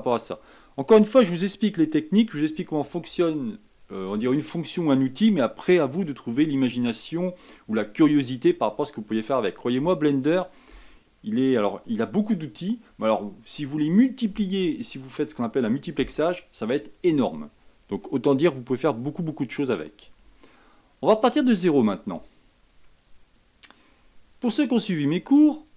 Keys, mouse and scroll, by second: 23.0-25.7 drag.